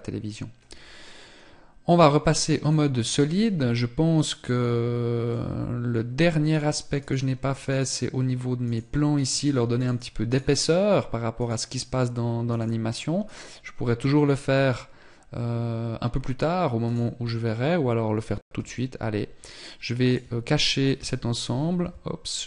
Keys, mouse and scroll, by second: 1.4 click, 4.9 middle click, 6.6 right click, 8.2 right click, 16.4 right click, 18.1 h, 19.5 right click, 20.5 g, 22.2 h.